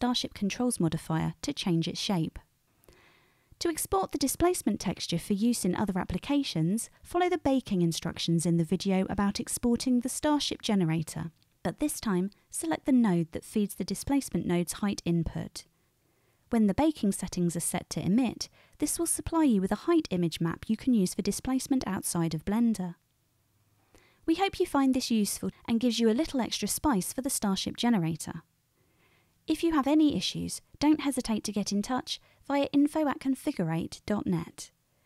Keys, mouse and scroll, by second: 2.6 middle click, 2.8-7.3 drag, 12.5 ctrl+click, 12.5 ctrl+middle click, 12.5 ctrl+right click, 13.7-17.3 ctrl+shift+drag, 17.3-24.1 middle drag, 24.0-35.0 drag, 24.0 right click.